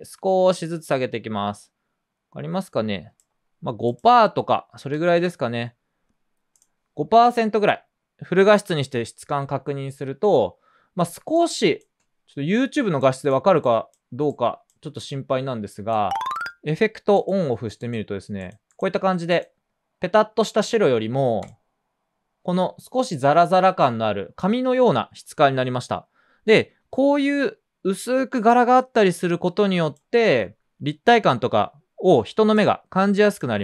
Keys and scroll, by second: 4.9 5, 5.2 Return, 10.0 typing, 11.1 space, 11.6 space, 11.7 space.